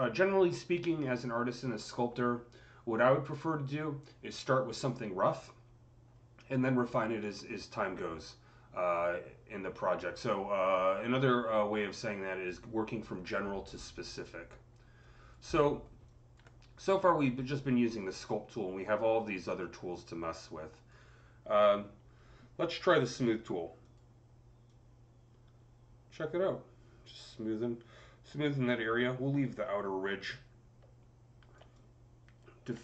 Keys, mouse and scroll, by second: 14.6 scroll down 1, 14.9 click, 15.4 alt+middle click, 16.6-23.1 alt+drag, 23.7 alt+click, 24.5-31.7 drag, 31.7-32.8 alt+drag.